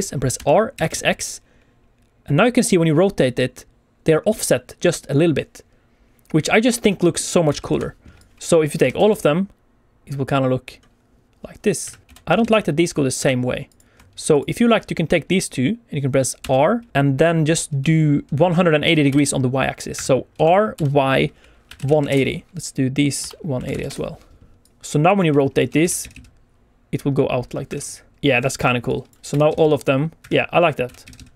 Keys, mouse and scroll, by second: 0.3 r, 0.7 x, 0.8 x, 6.8 Escape, 7.0 middle click, 7.5 alt+a, 7.6 KP_1, 8.1 click, 8.6 middle click, 8.7 r, 8.9 x, 9.0 x, 11.8 Escape, 12.0 click, 12.0 KP_1, 12.2 r, 12.2 x, 12.4 x, 13.1 Escape, 13.6 click, 14.3 shift+click, 16.4 r, 19.2 z, 19.3 y, 19.9 Escape, 20.3-23.7 typing, 22.0 Return, 22.5 Escape, 22.5 shift+click, 23.8 Return, 24.6 click, 24.8 shift+click, 24.9 r, 25.1 x, 25.2 x, 26.5 Escape, 26.8 click, 27.2 r, 27.4 x, 27.5 x, 30.2 Escape, 30.5 middle click, 30.8 r, 31.0 x, 31.1 x.